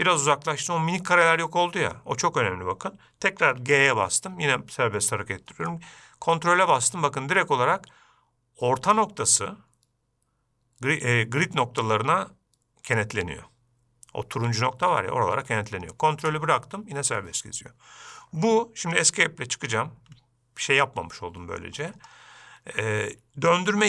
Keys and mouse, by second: 4.0 g.